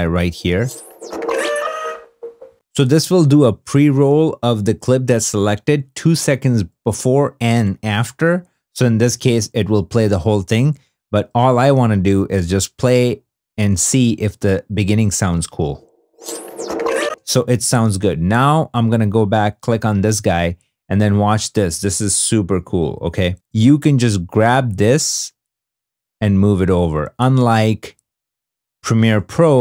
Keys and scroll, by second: 0.0 /, 9.5 i, 15.6 /, 17.0 space, 17.7 2, 19.8 2, 29.3 super+Tab.